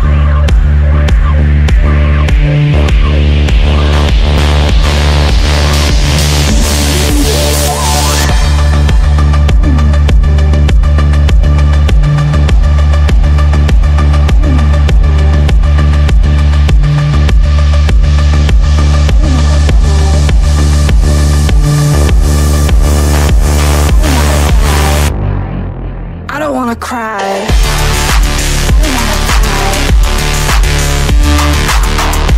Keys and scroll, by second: 7.1 F3, 9.1 F3, 10.4 shift+F2, 16.2 shift+F2, 22.6 F3, 25.4 shift+F2.